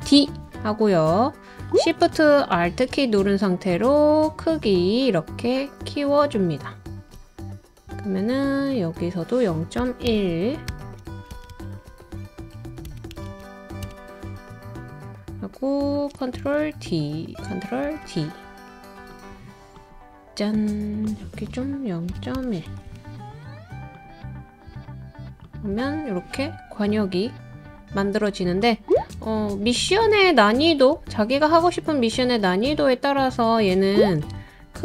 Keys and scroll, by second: 0.1 super+d, 9.8-13.8 typing, 16.4 super+d, 17.8 super+d, 21.9-23.1 typing.